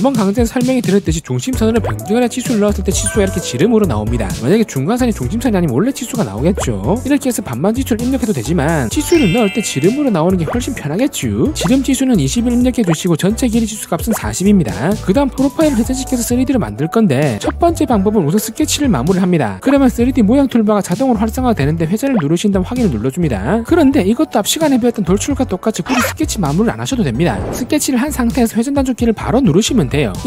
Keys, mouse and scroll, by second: 0.6 click, 1.2 click, 1.8 click, 4.8 d, 5.1 click, 5.9 click, 6.6 click, 9.0 d, 9.4 click, 10.0 click, 10.5 click, 10.7 2, 12.5 click, 12.9 click, 13.3 4, 18.4 click, 21.7 click, 23.8 click.